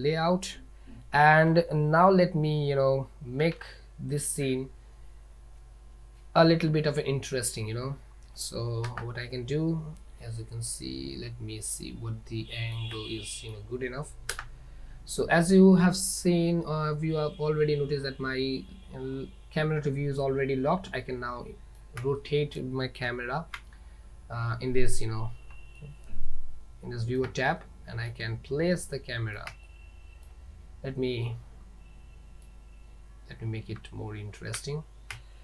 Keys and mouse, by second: 0.0 Delete, 0.0 click, 3.5 ctrl+s, 8.9 KP_0, 10.7-12.8 middle drag, 13.1-13.6 shift+middle drag, 14.4 KP_0, 20.3-21.8 middle drag, 22.2 shift+middle click, 23.1 z, 25.9-27.3 ctrl+middle drag, 27.8-28.2 shift+middle drag, 28.9-29.4 middle drag, 29.7-30.3 shift+middle drag, 31.4 middle click, 31.5 click, 31.5 right click, 33.9 z.